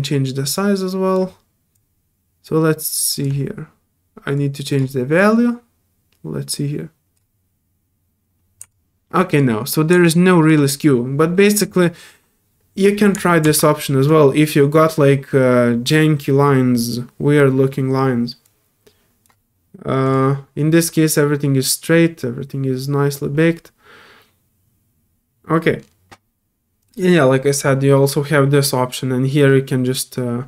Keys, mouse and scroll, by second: 0.5 alt+click, 1.7-3.2 drag, 4.3 click, 5.2-7.1 drag, 8.7 alt+click, 10.0 alt+click, 18.4 click, 20.0 click, 25.8 scroll down 1, 26.8 click, 29.8-30.4 drag.